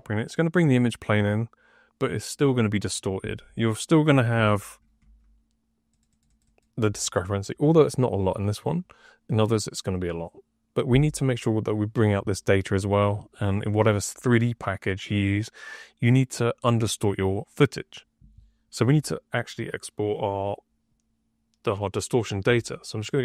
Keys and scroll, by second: 4.2 F3, 4.9 F3.